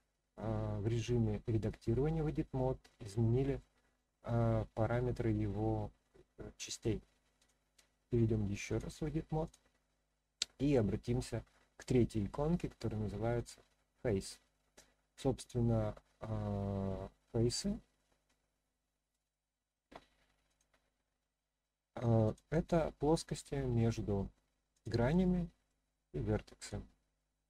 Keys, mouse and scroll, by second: 4.0-4.7 scroll up 1, 4.7-5.4 scroll down 2, 5.2-6.8 middle drag, 7.4 click, 8.7-9.5 drag, 13.3 click, 17.9 scroll up 1, 18.0-19.1 middle drag, 20.5 click, 22.2 click, 22.9-23.8 middle drag, 24.7 click, 25.2-25.7 middle drag, 26.6 click, 27.1-27.4 middle drag.